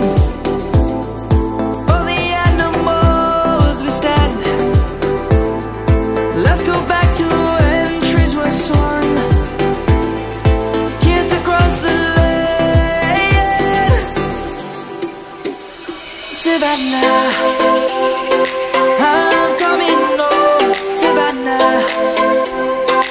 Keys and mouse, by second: 0.8 s, 2.0 right click, 3.4 s, 6.4 right click, 7.1 middle click, 7.6 click, 11.1 shift+s, 12.0 click, 15.0 ctrl+z, 17.6 Tab, 18.5 shift+a.